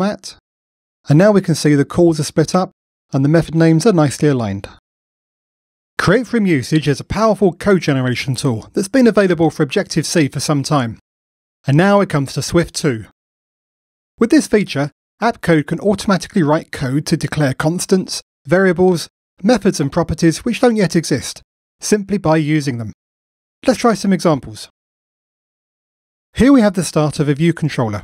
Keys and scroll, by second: 0.0 alt+super+l.